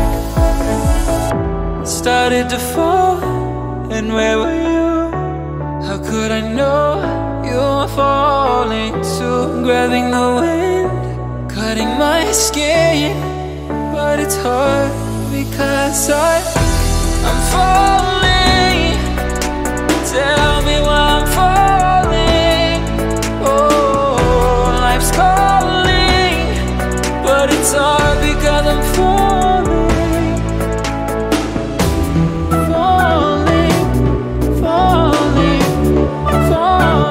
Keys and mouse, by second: 11.1 x, 18.8 shift+d, 19.5 shift+d, 20.8 shift+d, 24.9-28.6 drag, 32.3 shift+d, 34.8-37.1 drag.